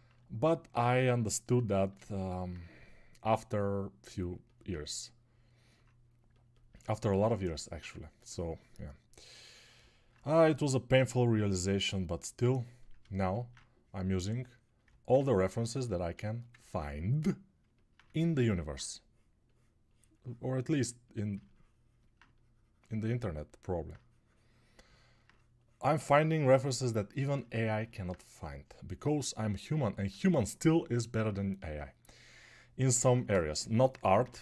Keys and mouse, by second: 22.1 click, 22.1 middle click, 22.1 right click.